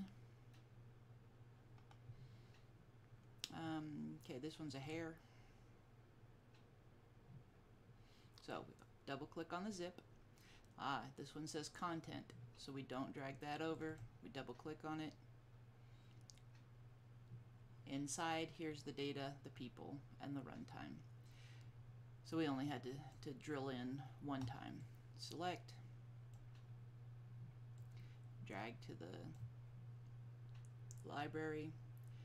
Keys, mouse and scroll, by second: 4.8 click, 13.8 click, 22.8 click, 25.0-26.4 drag, 27.9-29.4 drag.